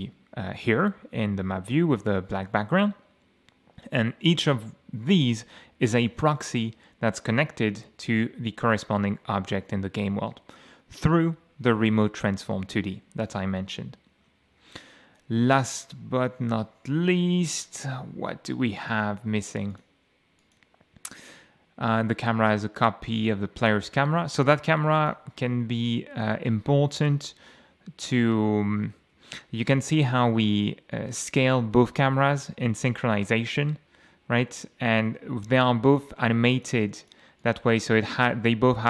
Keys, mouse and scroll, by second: 1.1 d, 1.5 w, 2.8 a, 7.5 m, 17.0-18.3 scroll up 6, 18.9 click, 19.7 click, 20.4 click, 25.0 click, 26.0 m, 27.0 m, 29.0 m, 30.0 m, 31.1 m, 32.2 m, 33.1 m, 34.3 m, 35.9 click, 36.5 click, 37.0 click, 37.4 click.